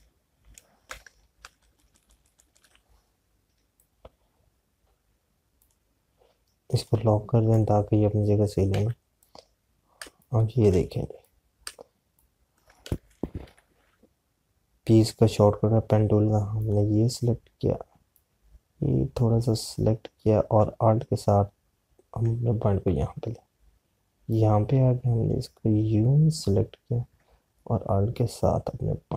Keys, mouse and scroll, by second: 4.9 click, 9.6 z, 10.0 click, 11.0 space, 12.2 click, 12.6 space, 14.3 p, 17.4 click, 25.2 click.